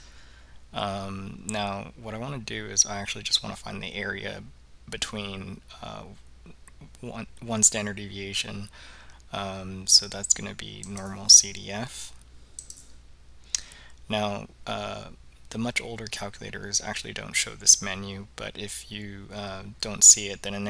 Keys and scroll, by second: 11.0 Down, 12.7 Return.